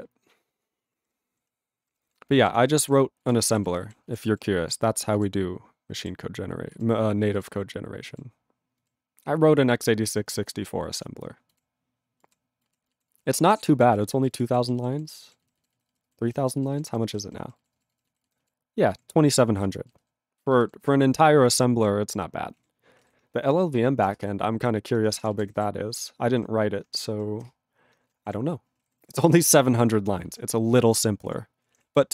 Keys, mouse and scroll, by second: 1.1 ctrl+n, 1.5-5.1 scroll down 11, 1.8 ctrl+n, 2.0 ctrl+n, 2.5 ctrl+n, 2.9 ctrl+n, 3.4 ctrl+n, 18.8 ctrl+p, 19.5 ctrl+e, 19.6 ctrl+space, 20.5 ctrl+alt+b, 20.8 ctrl+g, 22.5 ctrl+a, 27.7 ctrl+Return, 28.3 alt+shift+., 28.8 alt+>, 28.9 ctrl+=, 29.6 ctrl+p, 29.6 ctrl+e, 29.8 ctrl+space, 30.4 ctrl+alt+b, 30.7 ctrl+g, 31.3 ctrl+a, 31.6 ctrl+p, 31.7 ctrl+e.